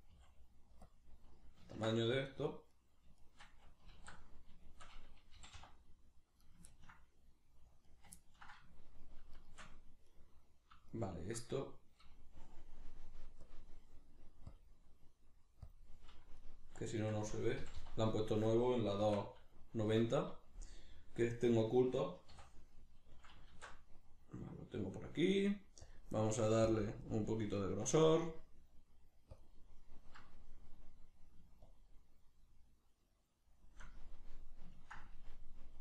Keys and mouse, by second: 0.1 s, 0.9 click, 1.7-2.7 ctrl+middle drag, 2.7 right click, 3.2 shift+right click, 3.9 alt+q, 4.7-6.5 shift+middle drag, 5.3 g, 6.5 right click, 6.7-7.9 ctrl+middle drag, 7.9 right click, 8.2-9.3 ctrl+middle drag, 9.3 shift+right click, 10.1 right click, 10.9 shift+right click, 13.5-16.4 drag, 16.4 right click, 16.9 shift+right click, 17.6 g, 18.5 click, 18.9 s, 20.0 click, 20.7-26.4 middle drag, 22.3 a, 23.5 alt+q, 26.4 click, 27.5-29.3 middle drag, 29.3-29.7 drag, 29.7-31.7 middle drag, 31.7-34.1 shift+drag, 34.1-35.8 middle drag.